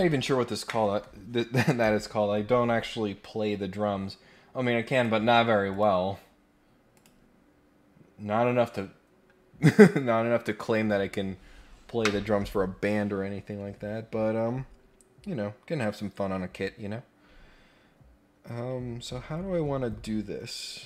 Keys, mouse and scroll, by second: 4.9 click, 5.7 click, 6.9 click.